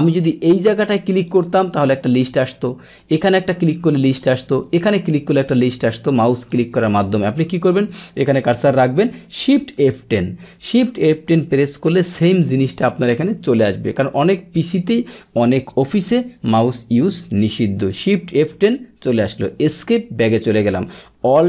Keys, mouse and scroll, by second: 2.5 click, 3.1 right click, 4.0 click, 4.6 right click, 5.4 click, 5.5 right click, 6.3 click, 6.9 click, 7.6 click, 9.8 shift+F10, 13.9 click, 18.3 shift+F10, 19.6 Escape.